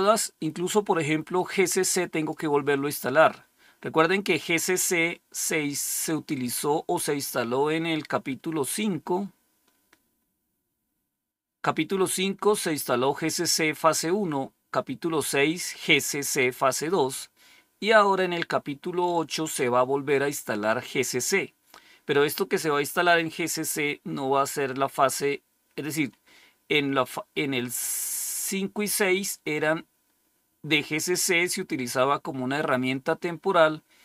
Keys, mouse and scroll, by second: 1.2-2.7 drag, 3.9-6.2 scroll up 1, 6.2 click, 8.0-8.8 scroll down 2, 9.2-10.6 scroll down 3, 10.6 scroll down 1, 11.3 scroll down 1, 12.0-12.5 scroll down 1, 14.3-16.3 scroll down 2, 17.1-22.7 scroll down 4, 26.2-28.0 scroll up 2, 28.6 scroll up 1.